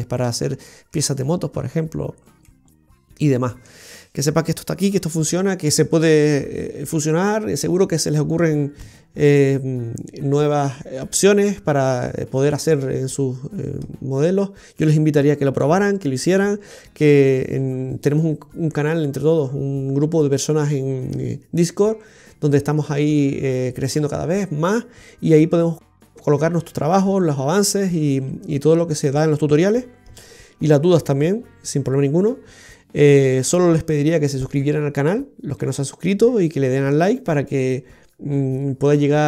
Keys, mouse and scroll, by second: 2.4 middle click.